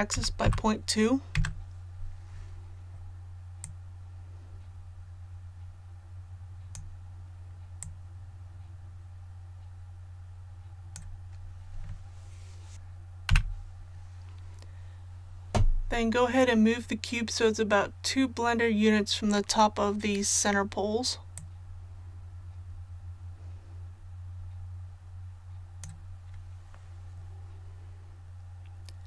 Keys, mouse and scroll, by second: 0.0-0.4 typing, 3.6-11.1 drag, 13.3 KP_1, 21.3-26.1 drag.